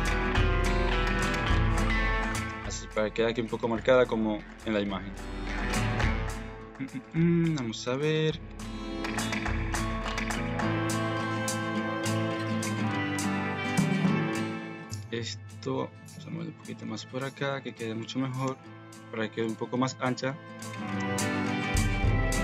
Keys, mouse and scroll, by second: 0.4 Tab, 0.7 middle click, 1.4 middle click, 2.2 middle click, 3.8 middle click, 4.4 KP_1, 6.3 middle click, 7.2 Tab, 7.7 middle click, 8.4 a, 8.6 KP_1, 8.9 KP_Decimal, 9.4 Tab, 10.5 shift+click, 12.8 click, 13.1 Tab, 13.7 alt+z, 14.2 shift+click, 15.1 click, 15.7 g, 16.8 alt+z, 17.5 alt+z, 17.7 click, 18.2 alt+z, 18.4 g, 19.8 alt+z, 20.3 click, 20.7 alt+z, 20.9 g, 22.1 middle click.